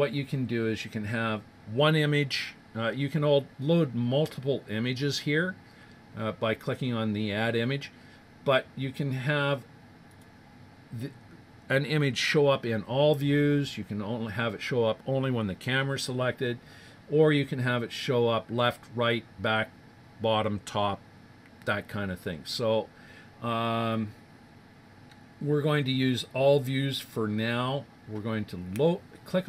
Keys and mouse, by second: 10.1 click, 29.4 click.